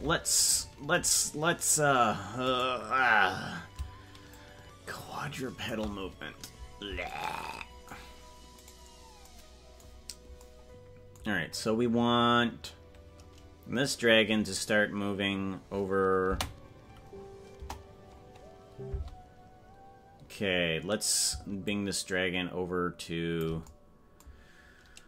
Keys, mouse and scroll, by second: 2.5 right click, 4.3-5.7 shift+drag, 8.9 right click, 17.7 KP_0, 18.9 space, 21.6-23.4 shift+drag.